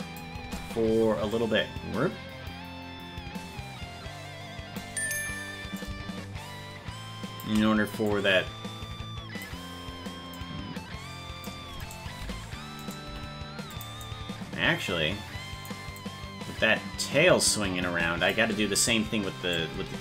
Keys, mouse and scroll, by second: 1.3-4.7 drag, 5.7-7.4 drag, 8.0-9.4 drag, 10.3-11.4 drag, 11.8 right click, 12.2 g, 12.8 right click, 13.0 g, 14.0-15.7 drag, 16.0-18.3 drag, 19.5-20.0 drag.